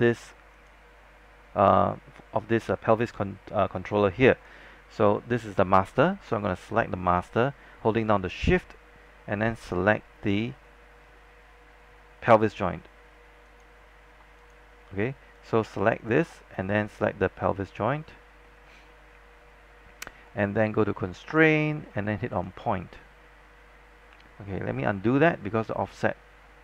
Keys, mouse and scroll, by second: 3.0 click, 13.6 shift+click, 17.7 shift+click, 21.3-22.5 drag, 25.1 z, 26.0-26.4 scroll down 1, 26.4 scroll up 1.